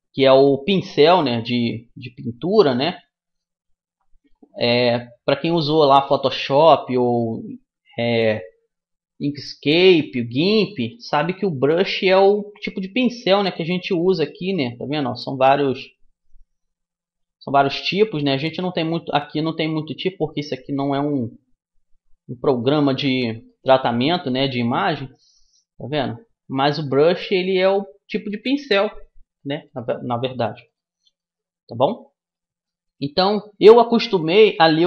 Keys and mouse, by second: 3.3-8.5 drag, 10.3 middle click, 10.9-12.7 drag, 13.1-15.4 drag, 18.5-20.3 drag, 20.9-22.7 drag, 23.1 click, 23.5-24.7 middle drag, 25.0-26.7 drag, 26.7-28.0 middle drag, 28.7-33.4 drag.